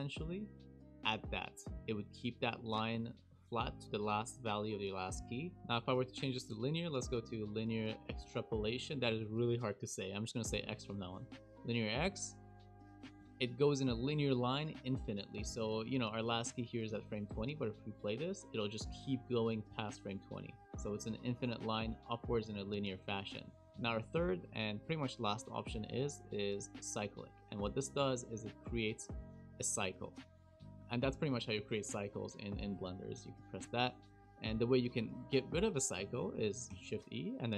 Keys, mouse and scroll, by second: 5.6 ctrl+z, 6.8 shift+e, 12.9-13.6 scroll down 8, 13.6 shift+middle click, 15.6 space, 15.9 Right, 15.9 space, 17.5 space, 19.0 space, 19.9 click, 22.8 shift+middle click, 25.6 shift+e, 29.0 space, 30.6 space, 31.9 KP_Decimal, 32.5-33.2 scroll down 13, 33.2 shift+middle click, 36.7 shift+e.